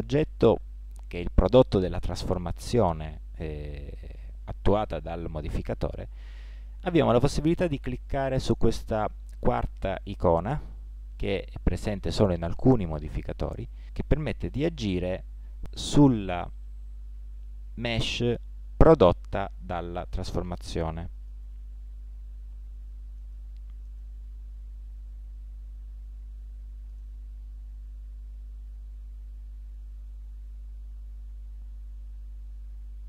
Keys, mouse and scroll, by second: 27.9 s.